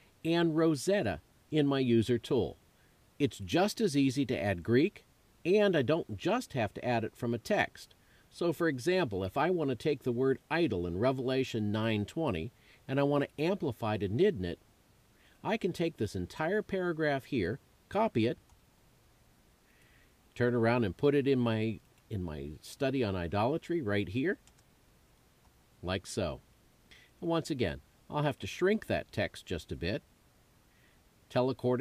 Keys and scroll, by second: 17.5 super+c, 24.6 super+v.